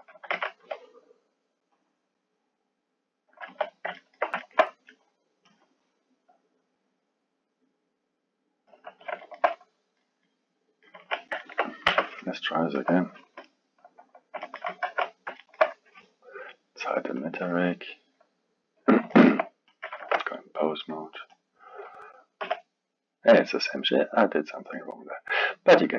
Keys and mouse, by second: 1.7-3.5 drag, 3.5 KP_1, 4.0-5.6 ctrl+middle drag, 5.6 click, 6.8-9.2 drag, 9.2-10.9 alt+middle drag, 10.9 KP_1, 11.4 ctrl+middle click, 11.9 Tab, 12.8-14.4 drag, 14.4-14.9 alt+middle drag, 14.9 shift+z, 15.4-17.2 alt+middle drag, 17.2-19.1 drag, 19.1-19.7 alt+middle drag, 19.7 click, 20.0 ctrl+Tab, 21.3 click, 22.4 g.